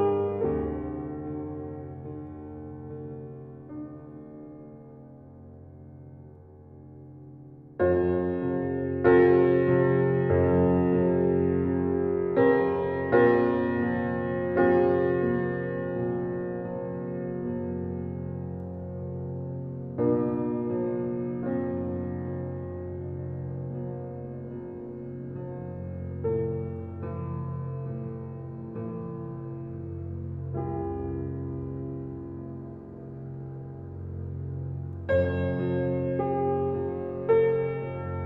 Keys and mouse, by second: 0.7 click, 1.2 click, 2.3 click, 3.5 click, 4.0 click, 4.0 typing, 4.8 click, 5.3-7.0 drag, 7.7-9.5 drag, 10.0 click, 11.2 click, 19.8-22.2 drag, 22.2-27.0 drag, 27.2 -, 27.3 -, 27.5 -, 28.9 click, 29.5 click, 30.7 click, 32.3-33.3 drag, 32.3 typing, 35.7 click.